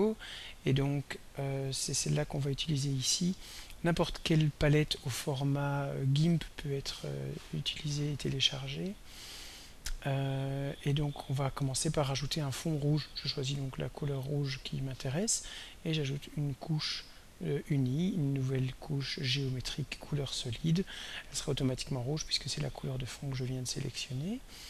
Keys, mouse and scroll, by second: 0.0 click, 2.7 click, 4.0 click, 5.3 click, 6.8 click, 8.9 click, 13.7 click, 15.7 right click, 20.4 click.